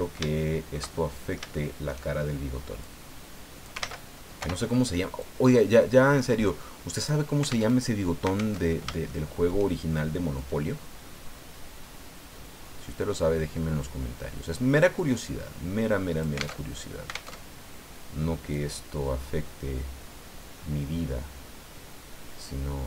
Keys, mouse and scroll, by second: 2.8-3.8 drag, 3.8 ctrl+z, 4.4 o, 5.2-7.2 drag, 7.7 alt+Tab, 8.6 alt+Tab, 9.0 shift+click, 10.3 click, 10.7-11.4 scroll down 4, 11.6-11.9 scroll down 2, 15.3 scroll down 2, 16.6 alt+Tab, 17.3 alt+Tab, 18.5-22.8 drag.